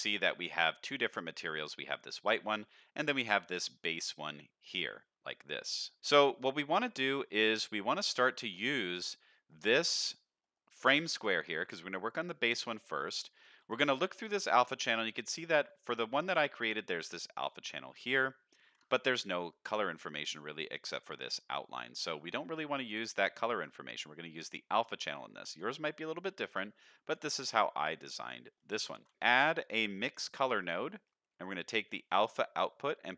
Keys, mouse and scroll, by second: 0.3 middle click, 1.1 middle click, 2.5 middle click, 3.2 click, 3.7 middle click, 5.3 middle drag, 6.1 middle click, 6.9 middle click, 7.3 middle click, 8.3 click, 9.0 middle click, 9.5 click, 10.4 middle click, 11.0 click, 12.4 middle click, 13.0 ctrl+shift+click, 13.2 ctrl+shift+click, 13.7 ctrl+shift+click, 14.1 click, 14.8 middle click, 15.2 scroll up 2, 15.5 shift+middle click, 17.9 middle click, 18.4 click, 18.8 ctrl+shift+click, 20.4-20.9 scroll up 1, 22.1-23.4 scroll down 2, 23.4 middle click, 24.4-25.4 drag, 25.8 middle click, 26.4 click, 27.4 middle click, 27.9 click, 28.5 middle click, 28.9 shift+a, 30.8 middle click, 31.0 scroll up 1, 31.9-33.1 drag.